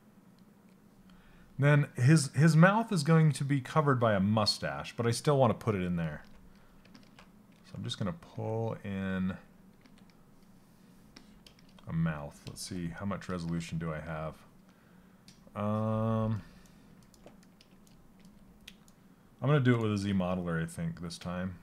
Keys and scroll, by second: 7.8 s, 9.3 s, 12.2 shift+f, 20.8 space.